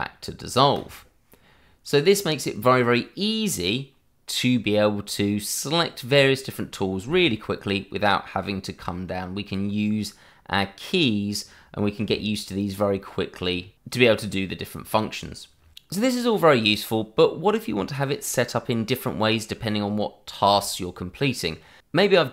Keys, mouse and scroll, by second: 0.7 click, 6.1 scroll down 1, 6.5 middle click, 7.1 shift+middle click, 7.1 middle click, 7.3 shift+middle click, 10.5-12.0 scroll up 1, 12.6 ctrl+click, 13.3 click.